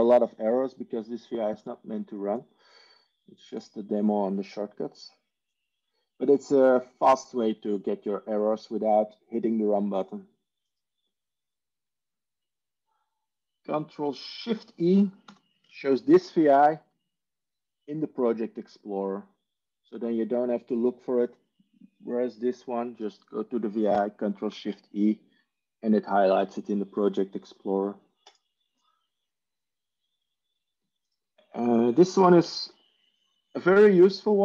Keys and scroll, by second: 15.2 ctrl+shift+e, 24.4 ctrl+shift+e.